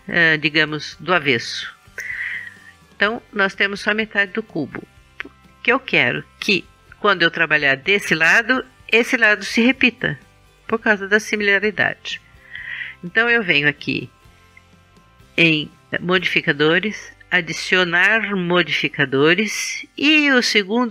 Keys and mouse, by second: 2.3 KP_3, 14.6-15.9 drag, 16.9-18.8 drag.